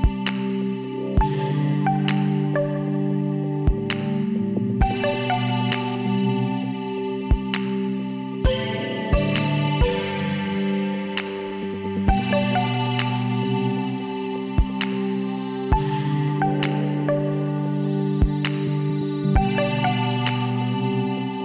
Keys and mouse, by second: 1.2 ctrl+n, 4.9-6.3 middle drag, 6.3-7.8 drag, 8.7 f, 9.2-10.5 middle drag, 12.4 e, 15.5 e, 16.6 s, 17.9 middle click, 18.8 middle click, 19.0 middle click, 21.1-21.4 middle drag.